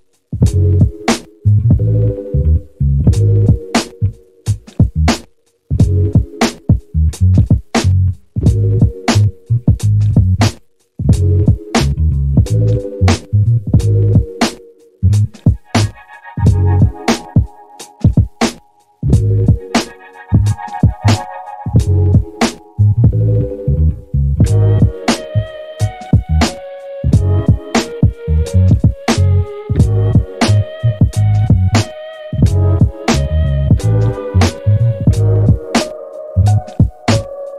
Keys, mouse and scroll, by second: 1.8 ctrl+click, 3.0 click, 4.1 click, 5.4-7.1 drag, 9.4-12.3 drag, 15.1 click, 17.3 click, 19.9-23.0 drag, 23.8-25.0 middle drag, 26.5 click, 29.0 middle click, 30.5-32.7 drag, 34.8 click, 37.4 shift+s.